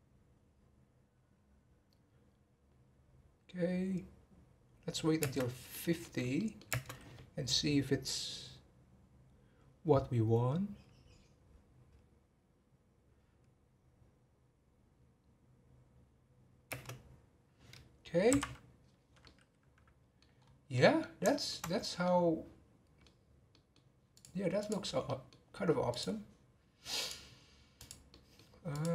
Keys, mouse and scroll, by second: 5.5 space, 5.7-6.1 middle drag, 6.1 scroll up 1, 6.4 middle click, 6.7 space, 19.2-20.4 middle drag, 20.4-20.7 scroll up 5, 20.7-21.7 middle drag, 21.7-22.0 scroll down 4, 22.0-24.1 middle drag, 24.1 click, 24.6 click, 25.0-25.9 middle drag, 25.9 click, 27.5 click, 27.7 click, 28.1-28.4 middle drag, 28.4 scroll down 3, 28.7 click.